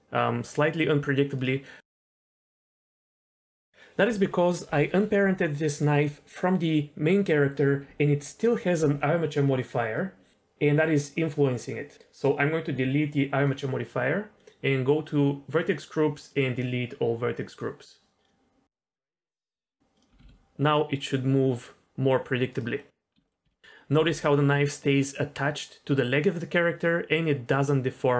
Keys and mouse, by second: 1.8 middle click, 2.3 Tab, 3.3 click, 13.4 click, 14.4 click, 16.5-18.3 drag, 19.6 Tab, 19.9 click, 20.1 r, 20.2 r, 22.8 middle drag, 23.1 z, 23.2 middle click, 23.4 r, 23.9 r, 24.1 r.